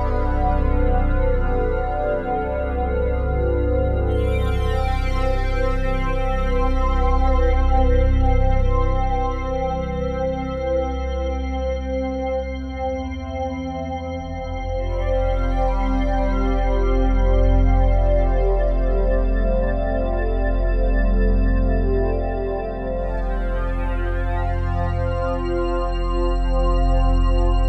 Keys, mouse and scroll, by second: 1.2 shift+click, 1.8 shift+click, 3.8 click, 4.9 typing, 5.4 Return, 10.6 click, 11.8-13.6 drag, 13.6 g, 14.1 z, 15.5 g, 15.9 x, 16.2-17.9 drag, 17.9 z, 19.5 g, 19.9 x, 22.6-24.4 drag, 25.0 ctrl+s.